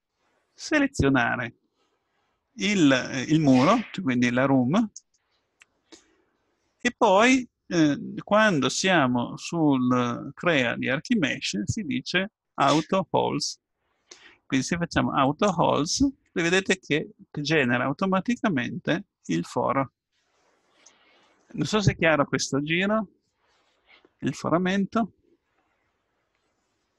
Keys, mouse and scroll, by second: 4.8-7.8 right drag, 15.6-17.0 drag, 17.6 middle click.